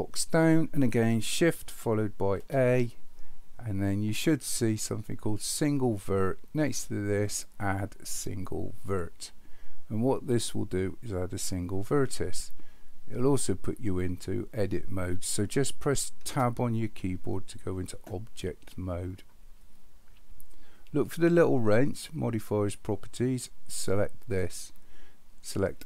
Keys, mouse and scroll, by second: 2.4 shift+a, 16.3 Tab, 24.0 click.